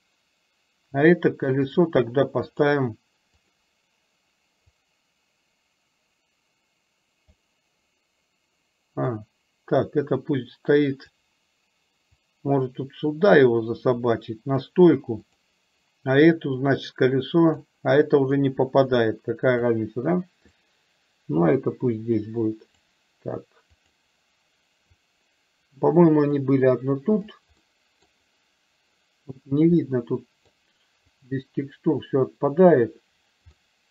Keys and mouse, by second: 1.6-3.6 drag, 4.9-7.4 drag, 9.3-11.3 drag, 12.4-14.7 drag, 15.4 click, 16.7-17.8 drag, 18.5-19.8 drag, 20.6 click, 20.9-23.0 drag, 24.0 click, 25.0-26.5 drag, 27.1 click, 27.8 middle click, 30.0 middle click, 31.2-32.8 drag, 33.6 middle click.